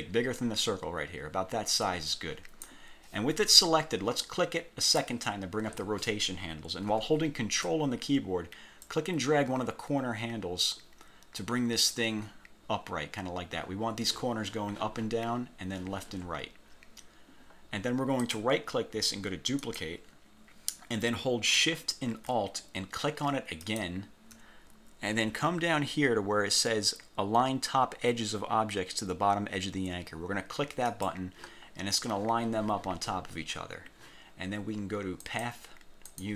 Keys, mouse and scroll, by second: 4.9 click, 8.9-12.1 ctrl+drag, 12.3 ctrl+scroll up 3, 17.6-17.9 scroll down 1, 18.4 click, 19.7 click, 23.8 alt+shift+click, 31.1 click, 31.8 scroll down 2, 35.4 click, 36.2 click.